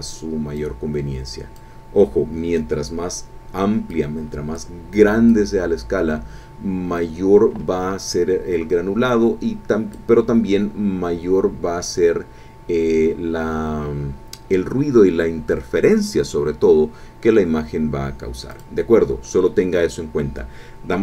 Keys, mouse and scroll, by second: 0.5-1.8 drag, 3.9 click, 5.3-10.1 drag, 10.7-11.1 scroll down 2, 11.9 scroll up 2, 13.2 scroll up 2, 18.5 click.